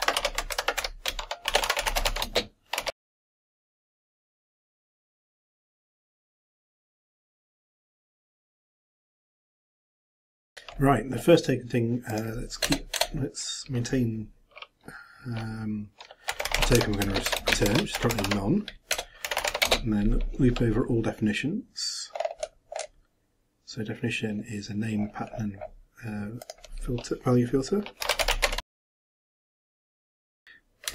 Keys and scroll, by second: 0.2 ctrl+a, 0.5 ctrl+m, 1.1 ctrl+shift+m, 1.3-5.5 typing, 7.7 shift+Return, 7.9 ctrl+b, 8.0 ctrl+m, 8.0-9.5 typing, 10.0 shift+Return, 10.2 shift+Up, 10.4 shift+Return, 17.4-18.7 typing, 28.7-30.2 typing.